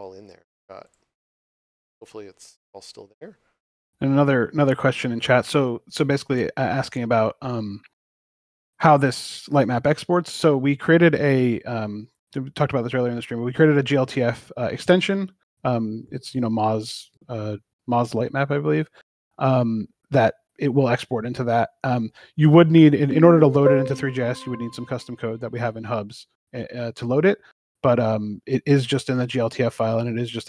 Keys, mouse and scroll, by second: 0.7 click, 6.1 click, 18.1 click, 25.3 click, 25.8-27.9 typing.